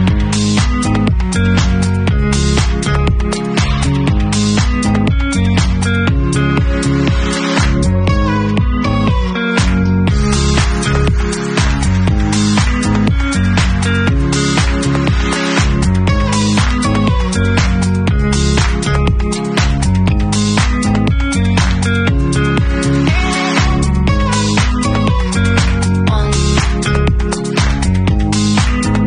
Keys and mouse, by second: 5.3 middle click, 6.1-12.8 alt+drag, 12.3 Tab, 12.8 alt+middle click, 12.9-14.2 alt+drag, 13.5 ctrl+s, 14.2-16.0 middle drag, 14.9 Tab, 15.5 Tab, 16.0-18.7 alt+drag, 18.7 middle click, 19.0 click, 19.5 middle click, 20.0 shift+right click, 20.1 shift+middle click, 20.4 shift+right click, 20.5 shift+middle click, 20.7 shift+right click, 20.7 shift+middle click, 21.0 shift+click, 21.0 shift+middle click, 21.3 shift+click, 22.1 shift+middle click, 22.3 shift+click, 22.3 shift+middle click, 22.5 shift+drag, 22.6-24.0 alt+middle drag, 24.0-28.2 alt+drag, 28.2-29.0 middle drag.